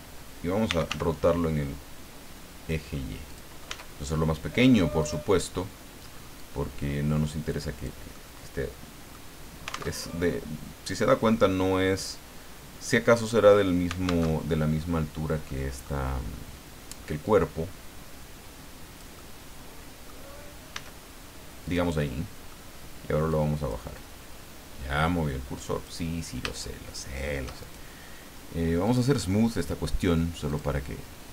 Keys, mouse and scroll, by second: 0.4-1.4 typing, 3.3 click, 3.7 s, 5.0 click, 6.4-8.0 drag, 8.1-9.3 middle drag, 9.3 scroll down 2, 9.9 alt+Tab, 14.3 alt+Tab, 15.4 middle click, 17.2-20.2 drag, 19.1-20.2 middle drag, 20.7 s, 21.7 click, 22.0 middle click, 23.3 click, 27.6 shift+right click, 28.9 click, 29.6 right click, 30.5 click.